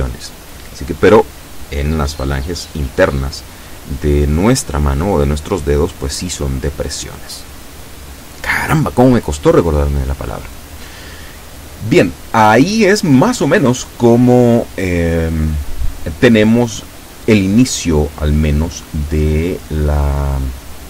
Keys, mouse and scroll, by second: 0.8-3.3 drag, 4.1 KP_7, 8.3 shift+middle click, 9.1-9.4 shift+scroll down 3.